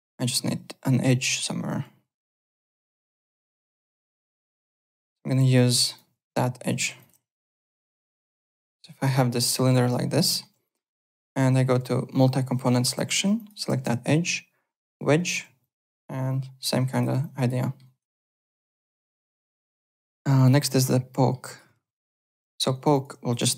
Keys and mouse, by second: 0.1 alt+middle click, 1.0 click, 1.7 w, 2.1 2, 3.4 click, 4.3 click, 5.3 click, 5.5 alt+middle click, 5.8 alt+click, 6.5-9.0 typing, 7.0 click, 7.4 click, 8.2 click, 8.6 click, 8.9 alt+click, 9.5 alt+middle click, 9.7 alt+right click, 10.2 alt+middle click, 11.7 6, 13.3 shift+click, 14.0 shift+right click, 15.6 alt+click, 16.2 click, 17.2 alt+click, 17.6 alt+middle click, 17.8 alt+right click, 18.1 alt+click, 18.4 w, 18.6 alt+click, 19.0 alt+middle click, 19.2 alt+right click, 19.4 alt+click, 19.8 alt+Tab, 20.3 click, 21.1 alt+middle click, 21.4 alt+right click, 21.4-22.7 typing, 21.8 click, 22.5 alt+middle click, 22.7 alt+right click, 22.9 alt+click.